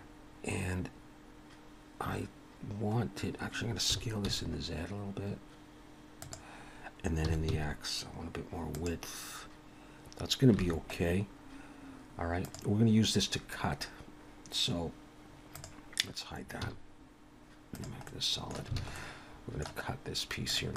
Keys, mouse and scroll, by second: 0.5 scroll down 1, 3.9 s, 7.3 s, 10.6 alt+a, 11.1-12.4 scroll down 1, 12.4 click, 15.6 click, 16.6 z, 18.0 middle click, 18.8 alt+a, 19.0 middle click, 20.0-20.5 scroll down 1, 20.5 click.